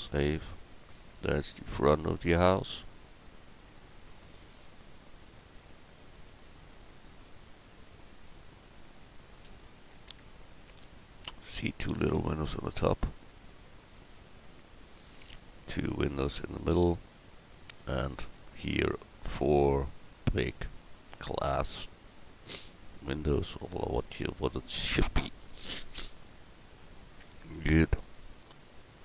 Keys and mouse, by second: 0.3 middle click, 3.6 middle click.